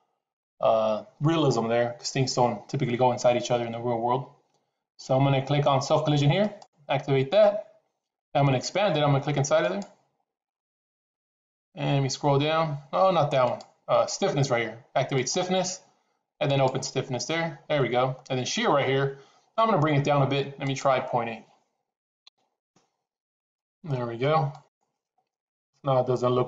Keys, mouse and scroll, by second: 10.4 click, 13.6-14.1 drag, 15.6 click, 16.9-17.6 drag, 21.2-24.0 drag.